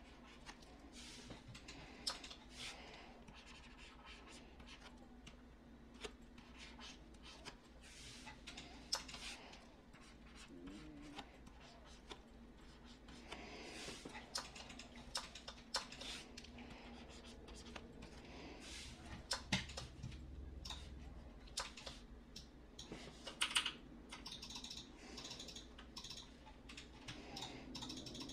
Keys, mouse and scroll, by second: 23.3 ], 23.5-24.0 ].